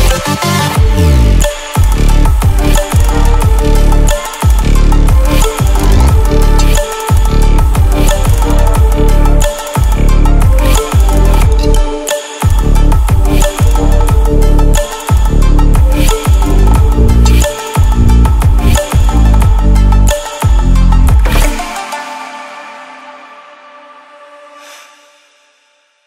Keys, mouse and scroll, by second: 2.1-9.4 typing, 5.3-10.5 drag, 10.8 right click, 11.4 click, 12.4-13.2 typing, 14.5-15.2 typing, 14.7 click, 18.0-18.3 ctrl+alt+scroll up 3, 18.4 click.